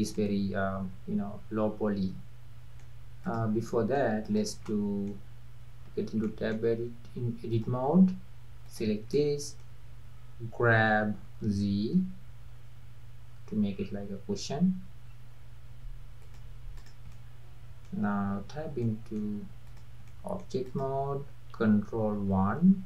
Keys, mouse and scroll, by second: 0.1-3.2 middle drag, 3.2 click, 3.7-4.3 middle drag, 4.3 drag, 4.6 scroll up 1, 4.7-5.9 middle drag, 5.9 Tab, 6.2-7.5 middle drag, 7.5-8.8 drag, 9.2 middle click, 9.6-10.3 scroll up 1, 10.8 g, 16.8 drag, 17.1-18.4 middle drag, 18.4 Tab, 18.6 scroll down 2, 18.8-19.6 middle drag, 19.6 click, 20.1-20.7 middle drag, 20.7 click, 22.2 ctrl+1.